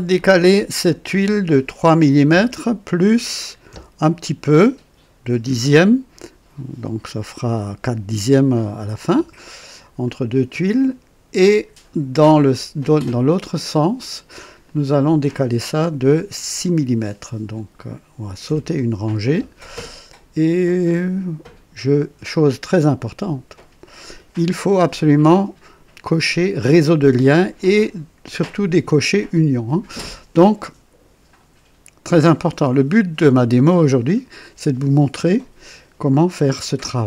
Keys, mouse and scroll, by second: 0.1 click, 2.2 KP_3, 3.7 KP_Decimal, 5.4 KP_2, 10.0-11.9 drag, 14.6 click, 18.4 KP_6, 20.1-22.1 drag.